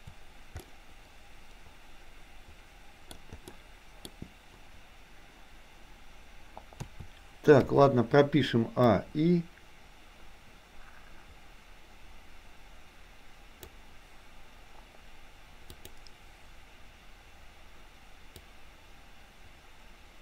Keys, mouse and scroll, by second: 0.7-3.2 middle drag, 3.6-4.2 middle drag, 6.8 a, 7.7 i, 9.1-13.8 drag, 15.8 click, 18.6-20.2 drag.